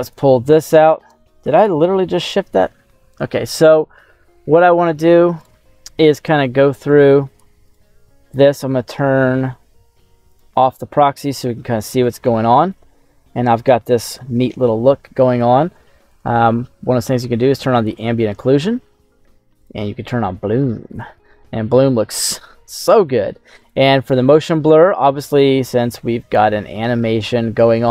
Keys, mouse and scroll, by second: 0.4 scroll down 1, 1.0 click, 2.8 scroll up 1, 3.0 scroll down 1, 3.2 middle click, 3.7-5.3 scroll up 2, 6.8 click, 7.6 right click, 8.4 middle click, 10.2 click, 10.9 scroll up 1, 11.2 middle click, 12.0 right click, 12.5 middle click, 17.7 click, 19.5 click, 22.0 click, 23.5 click, 27.0-27.9 scroll down 1.